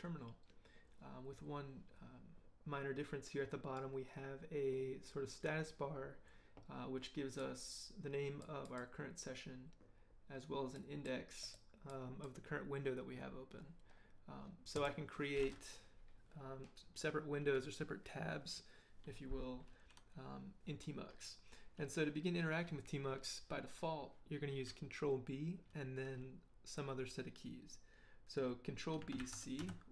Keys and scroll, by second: 29.2 ctrl+b, 29.6 ctrl+c.